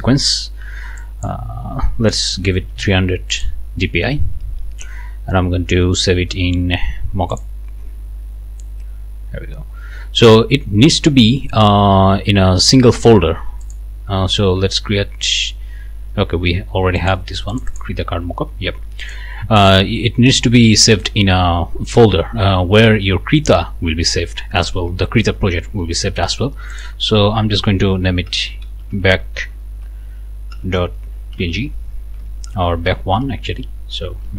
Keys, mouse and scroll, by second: 1.0 click, 2.3 KP_3, 2.6 KP_0, 3.3 click, 7.3 click, 13.6 click, 16.1 Escape, 17.0 click, 17.5 click, 19.0 click, 26.7 click, 28.0-29.4 typing, 30.7 p, 31.3 n, 32.4 ctrl+Left, 33.5 KP_1, 34.2 Right.